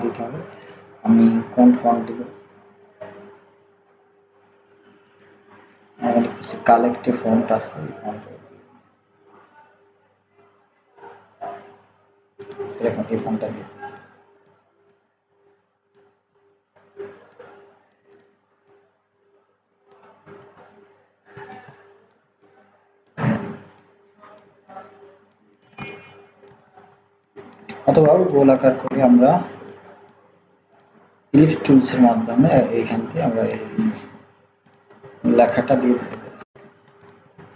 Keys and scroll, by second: 36.0 ctrl+x, 36.4 ctrl+z.